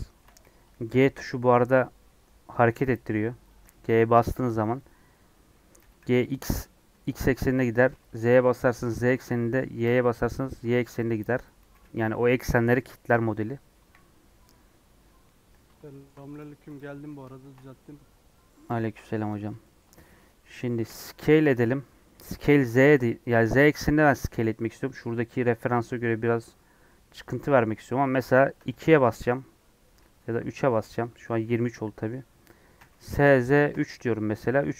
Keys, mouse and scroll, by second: 0.3 g, 3.8 g, 5.7 g, 11.0 middle click, 11.5 g, 13.7 KP_1, 14.8 scroll up 2, 15.8 shift+middle click, 16.3 click, 16.7 click, 17.3-18.3 shift+middle drag, 18.3-19.1 scroll down 2, 18.6 Tab, 19.1 Tab, 19.4 scroll up 1, 19.6 shift+middle click, 19.8-20.3 scroll down 4, 20.9 s, 32.8 s.